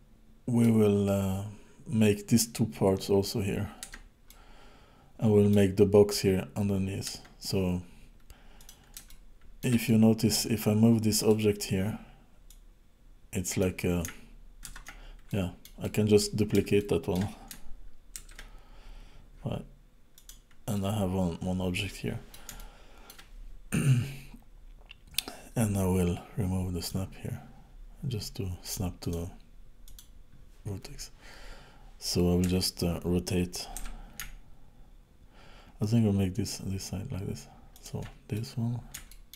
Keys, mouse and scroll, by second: 3.8 Tab, 4.3 middle click, 7.1 Tab, 8.5 click, 9.1 shift+middle click, 9.8 middle click, 11.2 click, 12.5 click, 14.7 ctrl+z, 15.3 middle click, 15.8 middle click, 16.7 shift+middle click, 18.2 shift+d, 20.7 middle click, 22.5 shift+middle click, 26.8 click, 28.7 click, 29.0 click, 32.4 KP_1, 33.8 r, 38.3 middle click, 39.1 shift+middle click.